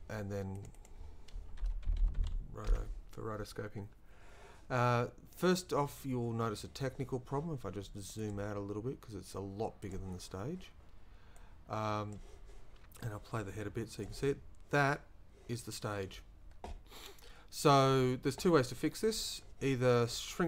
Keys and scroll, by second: 1.4-2.7 typing.